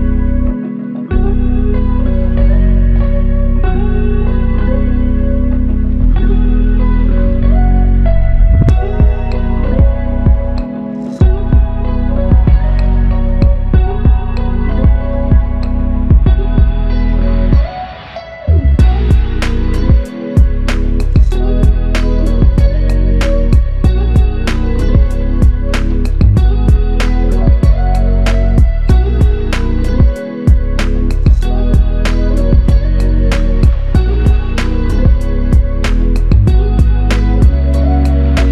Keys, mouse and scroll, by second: 2.5 alt+click, 4.7 alt+shift+click, 6.1 f, 8.0 ctrl+click, 12.3 g, 19.4 alt+click, 21.8 double click, 24.4 alt+click, 26.4 double click, 27.5 alt+click, 34.9 shift+click, 37.0 double click.